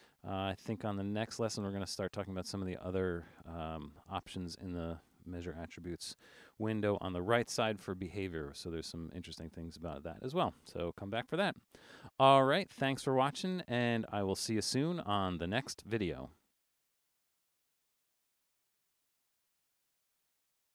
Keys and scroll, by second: 6.0 Return.